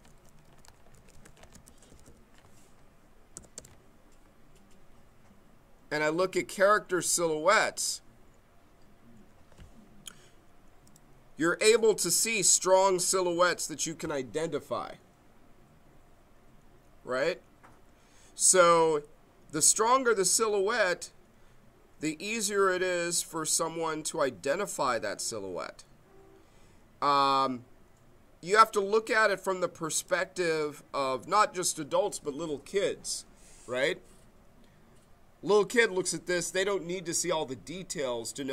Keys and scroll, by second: 0.0-2.3 typing, 3.4 Down, 3.5 Return.